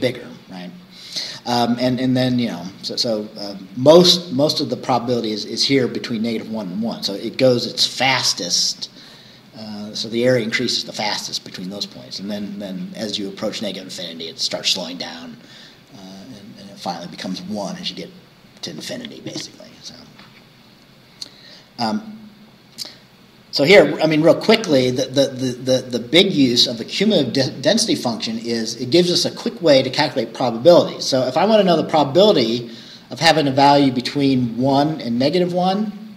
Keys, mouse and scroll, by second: 20.7-21.0 scroll down 2, 31.6 scroll down 2.